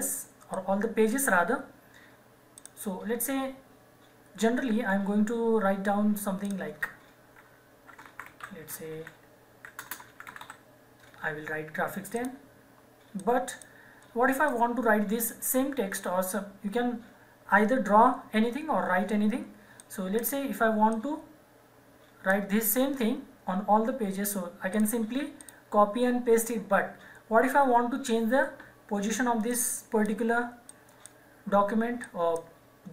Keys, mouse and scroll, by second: 0.5 click, 6.4 click, 7.8-10.9 typing, 12.1 click, 19.7 click, 24.7 click, 29.4 click.